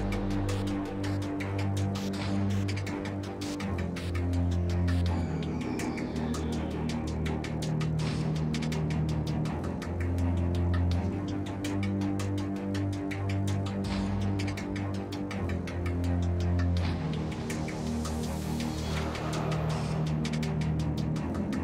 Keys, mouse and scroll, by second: 4.0 ctrl+z, 4.6 x, 11.0-12.3 middle drag, 19.2 ctrl+b.